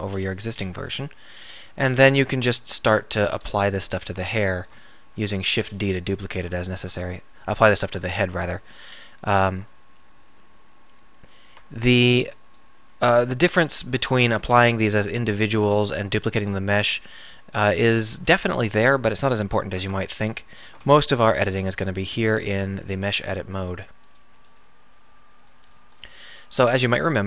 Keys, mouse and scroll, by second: 2.2 shift+d, 12.8 g, 18.3 g, 19.8 Tab, 20.7 a, 20.8 a, 25.5 middle click, 26.4 middle click.